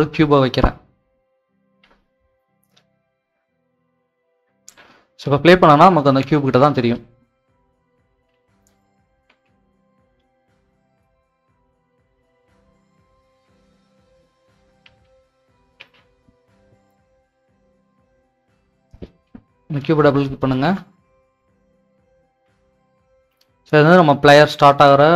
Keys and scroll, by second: 7.9-10.1 typing, 10.5 Escape, 11.3-13.8 typing.